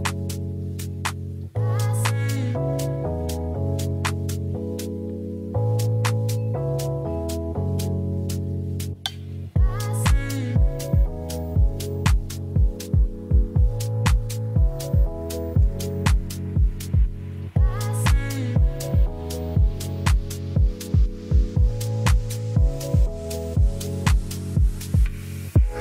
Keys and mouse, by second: 1.1-2.6 middle drag, 4.3 space, 4.7-5.5 drag, 6.6 middle drag, 10.1 shift+click, 10.5 shift+click, 11.3 shift+click, 11.6 middle drag, 12.6 shift+click, 13.2 shift+click, 13.6-14.0 middle drag, 14.7 ctrl+l, 23.7-24.1 drag, 24.8 click, 25.5 click.